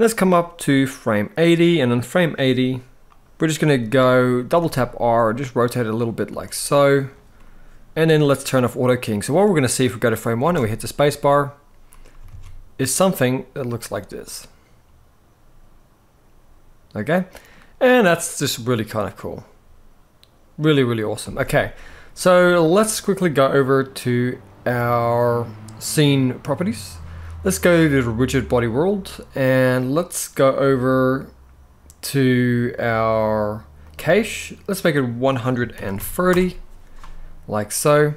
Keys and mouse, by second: 0.5-2.0 drag, 4.2 r, 4.3 r, 6.0 r, 8.2 click, 8.8-9.7 drag, 10.1 space, 12.0 alt+a, 16.8-17.2 middle drag, 18.2-18.5 middle drag, 20.9 space, 28.2 click, 33.6 click, 34.7-36.1 drag.